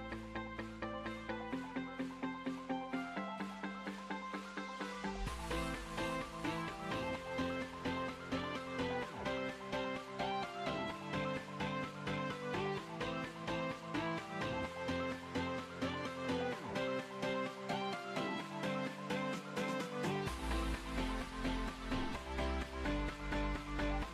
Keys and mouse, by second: 0.4 Tab, 9.2 KP_7, 9.8 Tab, 10.7 a, 13.6 middle click, 15.6-19.2 middle drag, 20.5 z, 22.7 z, 23.8 KP_1.